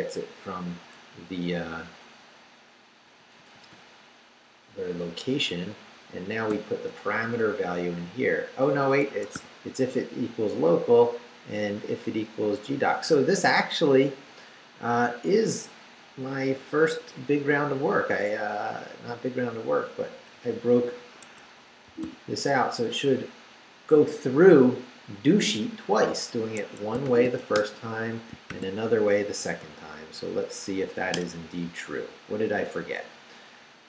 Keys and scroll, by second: 0.6 Right, 3.2 Right, 6.5 i, 6.9 BackSpace, 9.0 Escape, 9.3 u, 11.4 Down, 12.7 Down, 18.6 Up, 20.1 Up, 21.2 Escape, 21.8 d, 26.6 Escape, 27.0 shift+;, 27.4 shift+w, 27.5 Return, 28.3 shift+Return, 28.5 shift+;, 29.0 shift+Up, 31.1 Return.